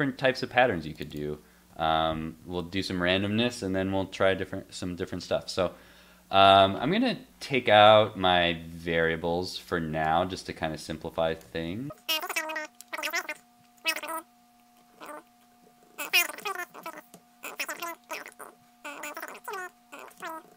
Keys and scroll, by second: 2.4 super+s, 11.5 super+x, 11.9 super+x, 11.9 super+s, 12.5 super+z, 12.6 super+z, 14.1 super+s, 15.0 super+s, 15.6 super+s, 16.4 super+s, 17.1 super+s, 17.8 super+s, 18.5 super+s, 19.5 super+s, 20.2 super+s.